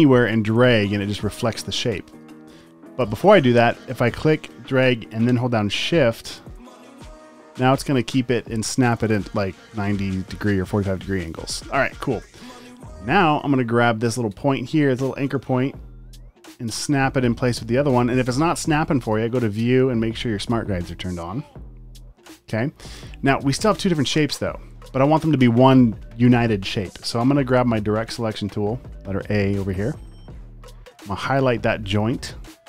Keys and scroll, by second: 2.5 super+z, 12.3 v, 13.0 space, 13.5 v, 24.3 super+z, 27.6 a.